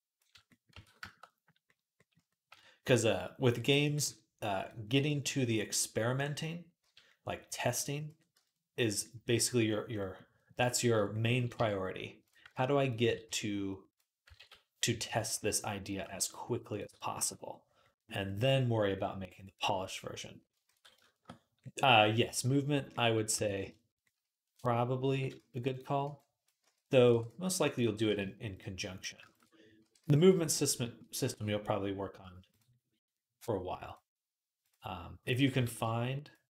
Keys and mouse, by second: 0.5 Tab, 2.3 Tab, 3.5-5.9 middle drag, 3.6 g, 5.9 click, 6.0-10.7 middle drag, 6.6 z, 7.7 z, 8.1 Tab, 10.3 Tab, 11.3 z, 12.2 b, 12.9 s, 14.2 ctrl+z, 14.7 a, 14.9-32.3 middle drag, 14.9 s, 15.8 g, 16.7 Tab, 17.0 z, 20.5 ctrl+s, 23.1 Tab, 25.2-27.9 typing, 29.6 r, 32.3 click, 32.4-34.4 middle drag, 34.4-36.5 drag, 35.5 ctrl+z.